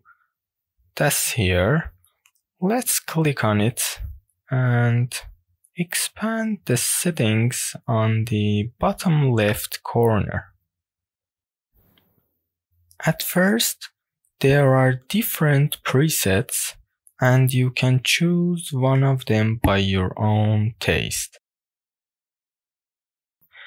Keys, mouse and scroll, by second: 5.8 scroll down 1, 5.8 KP_Decimal, 5.9-6.7 middle drag, 7.6 click, 10.4-16.7 drag, 17.9 click, 21.7-23.0 drag.